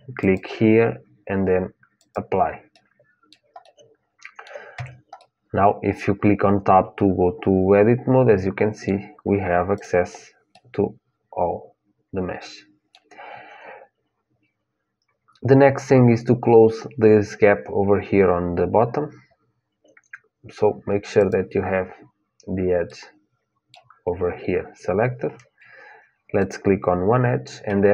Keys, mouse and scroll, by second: 2.5-6.9 middle drag, 4.5 Tab, 9.5-11.5 drag, 11.5 middle click, 18.4-21.0 middle drag, 20.9-22.9 drag, 22.9-24.7 middle drag, 26.1-27.9 drag.